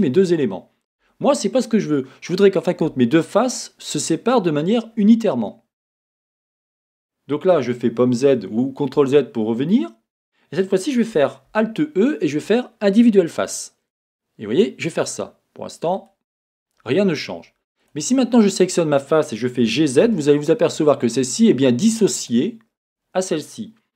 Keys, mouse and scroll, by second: 1.1 Escape, 15.6 middle click, 16.1 click, 17.8 click, 19.6 g, 22.8 click.